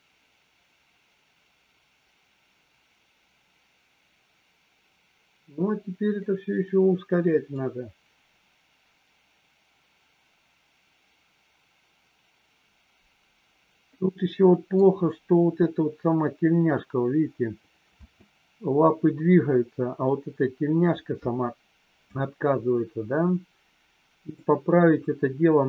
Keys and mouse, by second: 6.2-7.5 middle drag, 13.8-14.7 middle drag, 18.0 space, 24.3-25.6 middle drag.